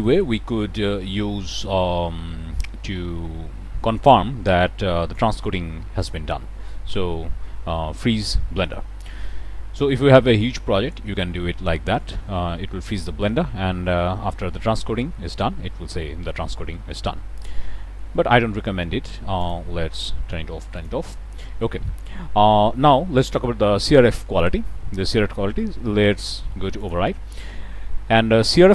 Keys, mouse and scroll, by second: 5.9 click, 19.3 click, 20.7 click, 21.4-21.9 middle drag, 26.7 click.